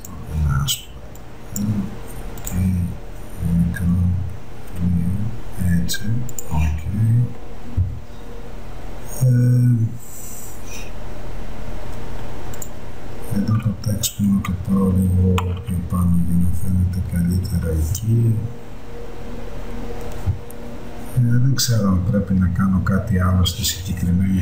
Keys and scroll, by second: 15.8 Up.